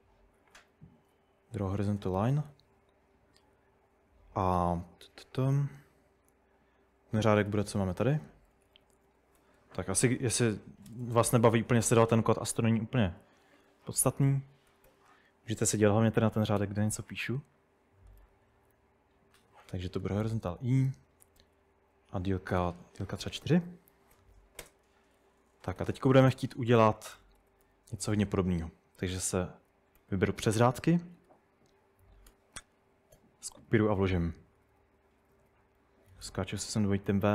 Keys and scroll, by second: 0.0-2.7 typing, 7.1-11.2 typing, 13.8 Escape, 14.0-16.8 typing, 18.0-24.6 typing, 25.8 typing, 27.2-28.4 typing, 29.7 typing, 31.2-37.3 typing.